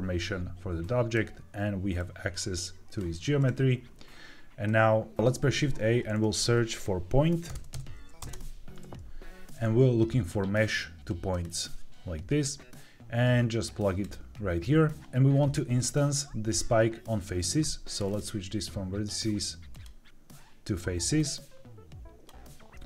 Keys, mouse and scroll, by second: 0.7 click, 1.9-3.3 drag, 4.6 click, 5.5 shift+a, 18.0-19.7 drag, 21.1-22.2 drag.